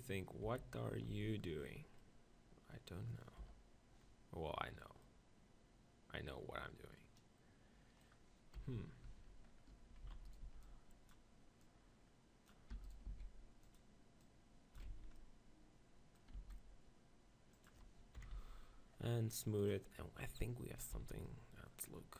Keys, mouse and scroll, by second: 0.5 KP_7, 1.1 Tab, 3.4 KP_1, 5.0-7.0 middle drag, 8.5 KP_1, 9.0 Tab, 10.0 middle click, 10.0 z, 10.3-11.9 drag, 10.4 b, 11.6 right click, 12.7 e, 13.1 s, 14.0-16.0 drag, 14.2 right click, 14.9 Tab, 14.9 z, 16.0-17.2 middle drag, 16.4 s, 18.3 KP_7, 18.4 z, 19.6 click, 21.0 z.